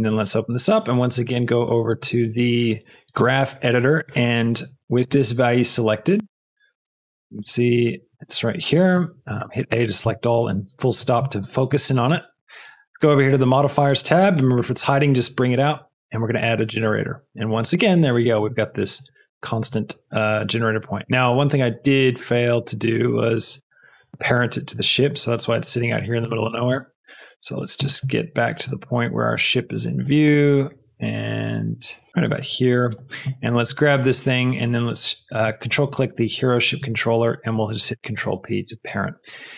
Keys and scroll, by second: 9.4 a, 32.1 x, 32.1 g, 37.8 ctrl+p, 38.6 ctrl+Return.